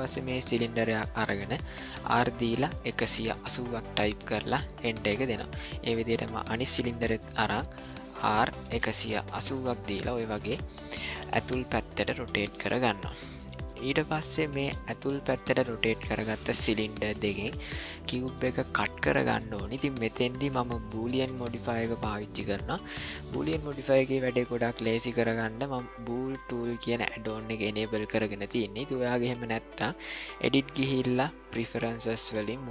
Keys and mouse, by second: 2.0 r, 6.4 click, 8.0 r, 13.7-15.6 middle drag, 15.9 shift+middle click, 16.4 middle click, 17.1 ctrl+middle click, 17.7 shift+middle click, 30.3-32.7 drag.